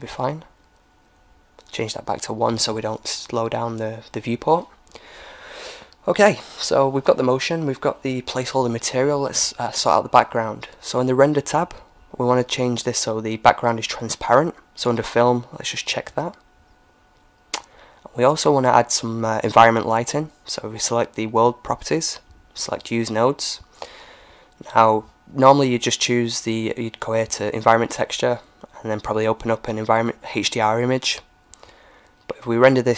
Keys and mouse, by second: 1.7-3.5 drag, 3.3-5.1 middle drag, 4.4 ctrl+s, 8.1-11.5 drag, 15.4-19.1 drag, 19.9-21.8 drag, 23.0-24.9 drag, 25.3-27.2 drag, 29.3 click, 30.3 click, 31.6-32.9 drag.